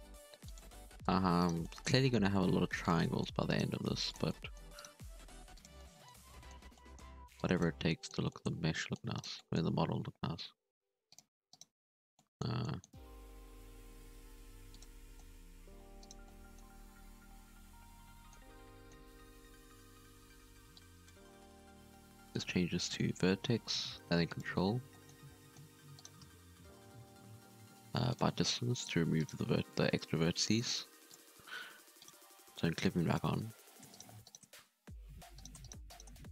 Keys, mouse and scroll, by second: 1.3 right click, 1.6 middle click, 2.1 g, 3.0 middle click, 3.4 right click, 3.8 g, 4.2 middle click, 4.7 right click, 4.8 g, 5.7 middle click, 6.5 scroll up 1, 6.7 middle click, 7.3 click, 7.7 scroll down 1, 7.8 middle click, 8.4 scroll up 2, 8.7 middle click, 9.1 right click, 9.3 middle click, 9.7 g, 11.5 right click, 12.0-12.6 scroll down 2, 12.1 middle click, 12.6 middle click, 12.9-13.5 scroll up 2, 13.5 v, 14.9 scroll down 1, 14.9 middle click, 15.6-16.0 scroll up 2, 16.0 right click, 16.2-17.5 middle drag, 17.5 scroll down 2, 17.6 middle click, 18.3-18.7 scroll up 1, 18.7 middle click, 18.9-20.7 scroll up 2, 20.7-23.5 drag, 23.5 g, 24.7 scroll down 1, 24.9 middle click, 25.3 scroll up 1, 25.4 middle click, 25.9 right click, 26.8 a, 27.4 m, 28.7 right click, 29.2 right click, 29.4 e, 31.9 click, 32.8-33.9 drag, 33.9 shift+right click, 34.2 shift+right click, 34.8 f, 35.3 right click, 35.6 shift+right click, 35.8 shift+right click, 36.2 f.